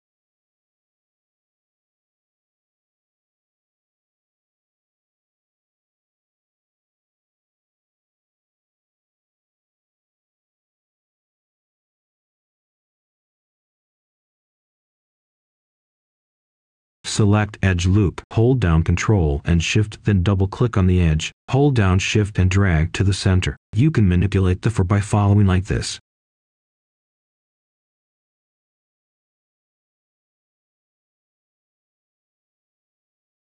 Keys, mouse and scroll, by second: 0.2 right click, 1.4-4.1 scroll up 1, 4.1-9.7 drag, 9.8-12.7 right drag, 13.1 click, 14.7 right click, 16.2-16.5 scroll down 1, 16.5-16.8 scroll up 1, 18.1 ctrl+shift+click, 18.9 right click, 20.2-22.8 shift+drag, 23.4 right click, 24.3 scroll down 1, 24.6-24.9 scroll up 1, 24.9 right click, 26.2-28.4 drag, 28.4 right click, 29.3 scroll down 1, 29.5 scroll up 1, 29.8 right click, 32.2 shift+click, 33.0 right click.